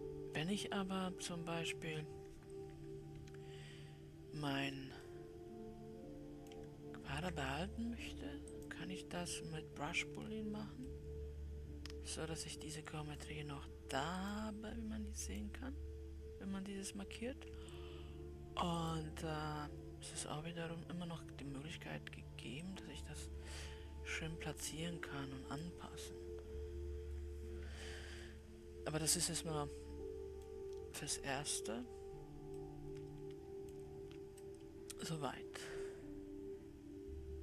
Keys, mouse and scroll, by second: 0.8-4.0 scroll up 1, 4.0 ctrl+z, 5.5-7.0 middle drag, 7.0-9.0 scroll up 1, 9.0-11.3 drag, 11.3-14.7 middle drag, 14.7-18.8 drag, 19.3-20.5 drag, 20.5-21.2 scroll down 2, 23.0-26.3 drag, 27.9 Escape, 28.7-31.9 middle drag, 31.9-32.9 scroll down 4, 32.9-37.4 middle drag.